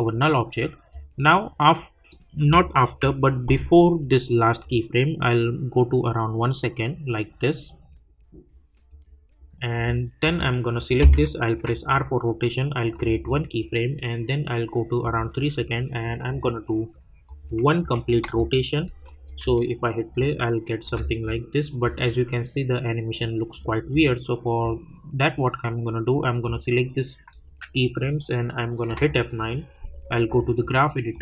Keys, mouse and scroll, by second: 2.9 =, 4.6-10.2 drag, 11.6 r, 12.9 click, 18.2 Return, 19.0 click, 19.2 space, 21.3-28.6 drag, 28.9 F9, 30.2-31.2 drag.